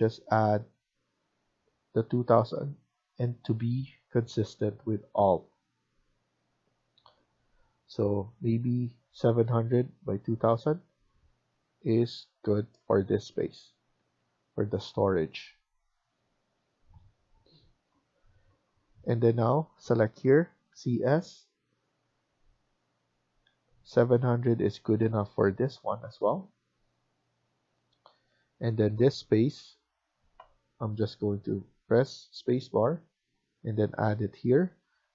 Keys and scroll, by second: 0.4 Escape, 3.3 Escape, 10.7 Escape, 10.9 Escape, 13.3 Up, 13.9 Down, 14.6 Escape, 14.8 Escape, 20.6 c, 34.3 Escape, 34.6 Escape.